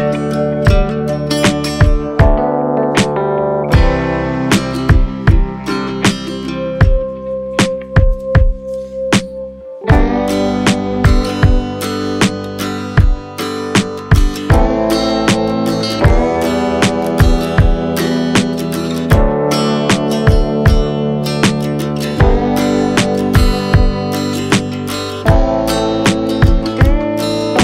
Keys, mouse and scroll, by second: 1.1-3.0 middle drag, 3.5 click, 4.3-6.2 drag, 6.2-7.0 scroll down 6, 7.0 click, 8.8-10.0 scroll down 1, 10.0 scroll down 2, 10.1-12.0 drag, 13.9-15.6 middle drag, 15.6 click, 18.0-19.2 middle drag, 19.2 click, 20.3 click, 20.9-21.8 drag, 24.0-24.8 drag, 24.8-25.9 middle drag, 25.9-27.6 scroll up 4.